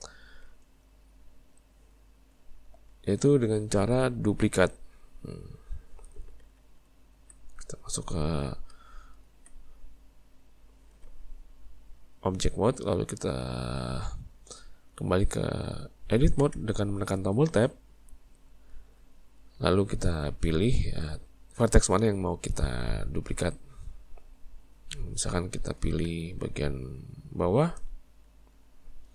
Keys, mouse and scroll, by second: 2.4 Tab, 2.9 Tab, 3.5-5.2 middle drag, 5.2 Tab, 5.9 Tab, 6.5 z, 8.7 z, 16.5 Tab, 20.8-27.2 shift+middle drag, 27.2 click, 28.6 shift+click.